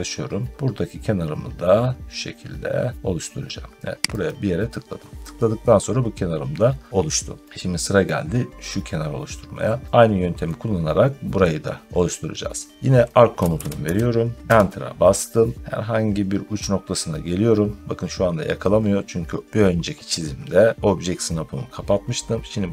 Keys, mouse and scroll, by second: 4.1 click, 7.4-7.8 scroll down 3, 7.9 middle click, 9.4 scroll down 2, 10.3 middle click, 11.3 scroll, 11.8 scroll up 1, 13.0-14.2 typing, 14.4 Return.